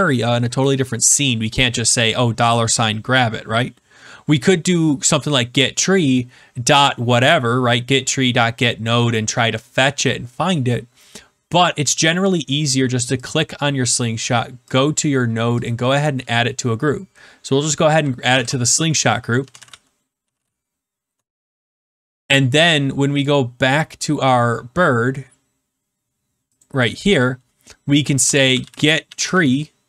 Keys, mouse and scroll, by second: 13.3 click, 14.7 click, 15.6 click, 18.2-20.8 typing, 21.1 Return, 23.2 click, 26.5 click, 28.2 Return, 28.2-29.8 typing.